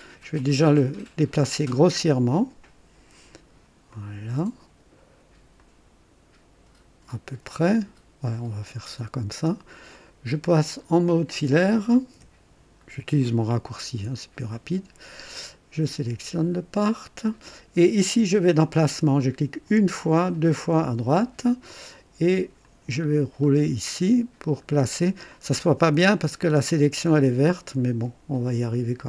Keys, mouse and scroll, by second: 0.3 click, 1.7-3.7 drag, 3.9-4.7 right drag, 5.6-7.7 drag, 8.5 click, 9.4 scroll up 1, 9.9-10.5 right drag, 10.7 click, 12.1 &, 12.7 scroll up 1, 13.2 middle click, 13.3-14.4 right drag, 16.0 click, 19.6 click, 20.3 click, 22.6 click, 23.1-23.7 scroll down 1, 24.9-25.3 scroll up 2, 25.6-28.2 right drag.